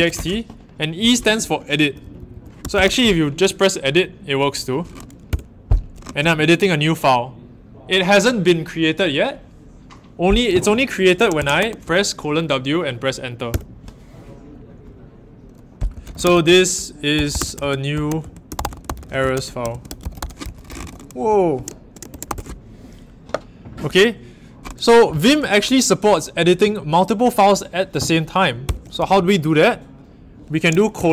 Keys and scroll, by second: 0.0-0.6 typing, 1.4-1.8 Left, 2.0 Left, 2.1 Left, 2.3 Left, 2.3-3.3 typing, 5.2 Return, 11.5 shift+w, 13.5 Return, 15.6-22.7 typing, 25.1 ctrl+alt+Right, 28.6 ctrl+alt+Return, 30.9 shift+;.